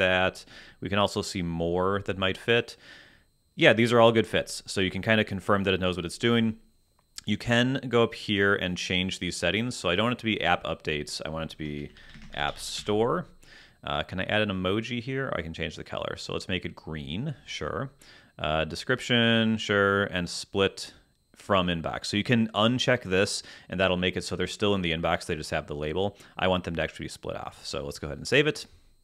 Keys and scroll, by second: 11.5-13.3 typing.